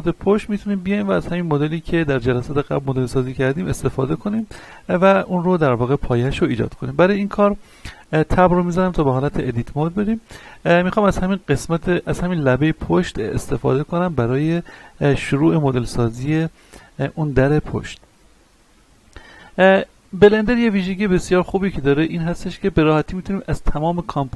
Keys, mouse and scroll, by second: 4.6-6.4 scroll up 1, 7.8-8.5 scroll down 1, 8.5 Tab, 10.3 middle click, 10.5 scroll down 1, 11.9 alt+right click, 12.5-13.0 scroll down 1, 13.0 middle click, 13.6-16.9 shift+middle drag, 16.9-24.3 shift+middle drag.